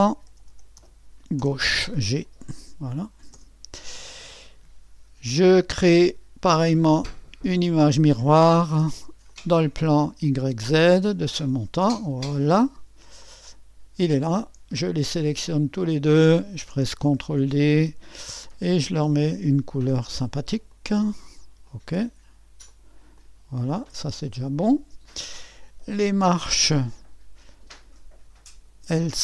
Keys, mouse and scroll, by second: 0.0-1.4 typing, 7.1-10.4 drag, 11.0 click, 13.2-17.2 drag, 17.2 ctrl+d, 18.9-29.2 drag.